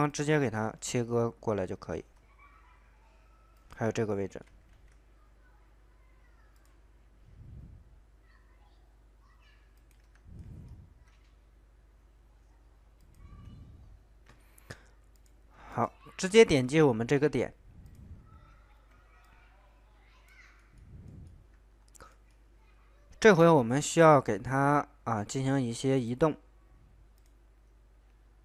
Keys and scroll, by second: 4.7 ctrl+z.